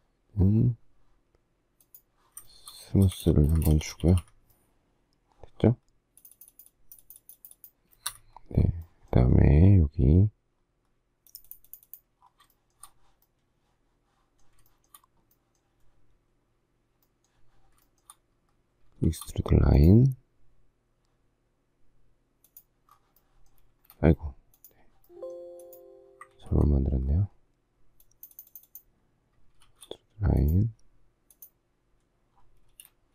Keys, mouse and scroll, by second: 2.5 shift+middle click, 3.0 space, 3.2 Escape, 3.5 space, 3.8 Escape, 6.1 click, 6.9 click, 8.1 Escape, 11.4 click, 12.5 shift+middle click, 14.7 shift+middle click, 17.9 shift+middle click, 19.0 shift+e, 23.7 space, 26.4 ctrl+z, 29.6 shift+e, 32.6 space.